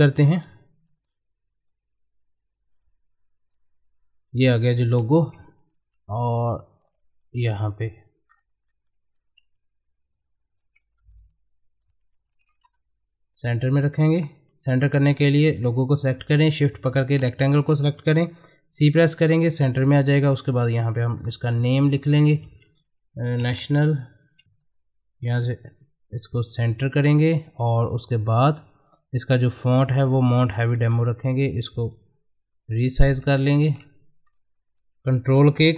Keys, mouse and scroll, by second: 0.3-8.3 drag, 8.3 scroll up 1, 8.7 middle click, 9.1-9.4 scroll up 1, 10.1 shift+click, 10.8 shift+middle click, 11.2-12.4 drag, 12.7 c, 14.8-17.6 drag, 18.7 c, 19.3 click, 21.1-21.5 scroll up 1, 21.5 click, 23.5 shift+n, 24.4 a, 24.4 Return, 24.5 click, 30.3 click, 30.7 middle click, 32.5 click, 33.9 c, 34.3 click.